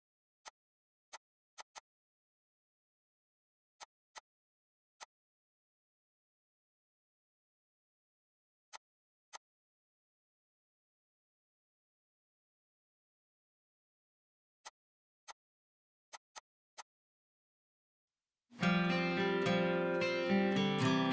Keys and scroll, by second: 2.5 g, 2.9 Escape, 3.6 f, 4.7 ctrl+z, 5.2-6.1 typing, 7.7 l, 13.8 ctrl+z.